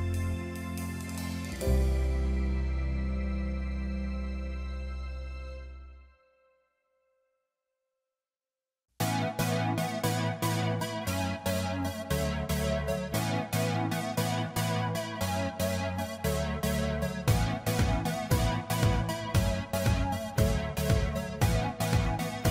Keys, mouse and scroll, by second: 0.7 alt+click, 6.5 Up, 6.9 Up, 8.5 ctrl+-, 8.9 ctrl+-, 9.5 ctrl+=, 10.7-11.1 scroll up 3, 11.1-12.5 scroll down 6, 12.8 shift+click, 14.4 ctrl+g, 16.1 ctrl+t, 17.3 alt+click.